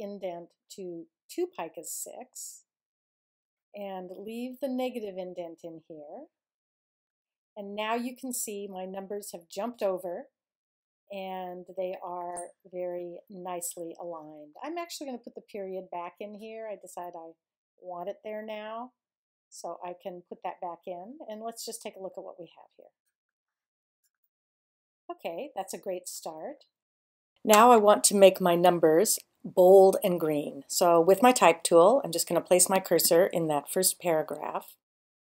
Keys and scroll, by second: 1.9 2, 4.8 Tab.